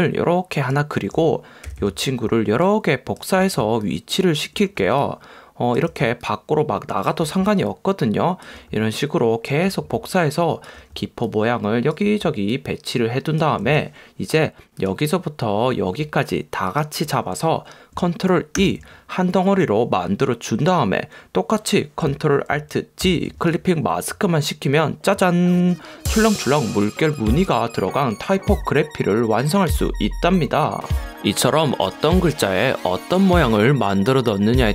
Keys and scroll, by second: 1.8 v, 18.8 super+e, 23.2 alt+super+g.